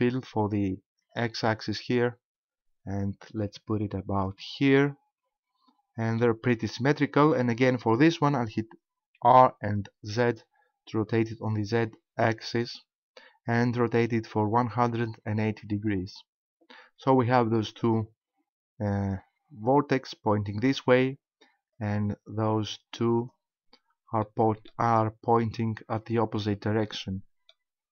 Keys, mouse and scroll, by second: 4.3 ctrl+click, 4.8 middle click, 9.2 r, 15.9 ctrl+click, 17.9 shift+right click, 21.7 shift+right click, 23.2 shift+right click, 24.3 shift+middle click, 26.9 middle click.